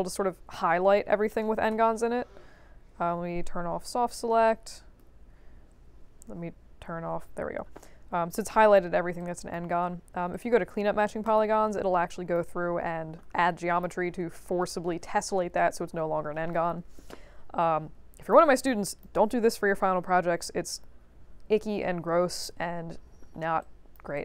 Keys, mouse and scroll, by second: 1.7 b, 4.0 b, 4.4 right click, 5.3 b, 7.1 4, 7.8 alt+click, 9.1 alt+click, 10.3 click, 11.2 click, 12.0 alt+click, 13.3 click, 14.1 right click, 18.2 click, 18.8 alt+click, 23.6-23.9 alt+drag, 24.1 click.